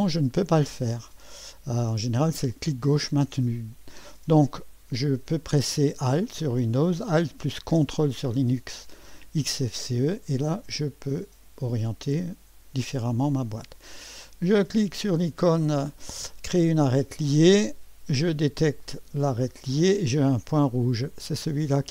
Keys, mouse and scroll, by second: 2.5-3.8 drag, 9.6-11.9 drag, 12.4-13.0 scroll up 1, 13.0 right click, 16.9 click, 18.8 click.